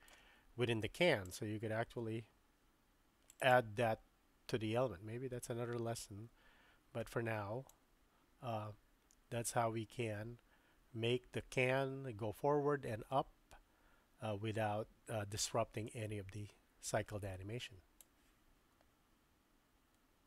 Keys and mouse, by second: 1.3-3.5 drag, 7.7-18.0 drag.